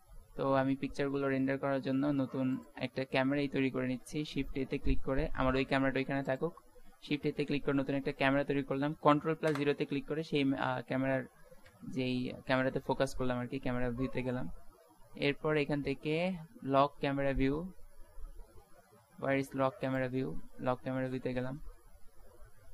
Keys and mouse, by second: 0.2 z, 0.6 z, 2.2 ctrl+s, 4.0 shift+a, 9.5 ctrl+KP_0, 11.7 n, 19.9 middle click, 20.0-22.0 drag, 22.0 middle click.